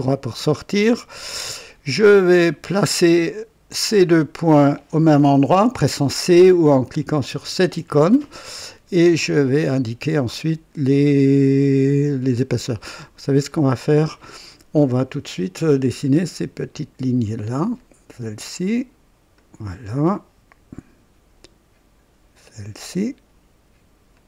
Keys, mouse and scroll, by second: 0.4 right click, 1.9 right click, 2.6 right click, 3.8-4.9 drag, 7.2 c, 9.3-12.4 drag, 12.9 scroll up 1, 13.5-14.3 right drag, 15.9 click, 17.7 click, 19.3 click, 20.1 right click, 22.3 click, 24.1 click.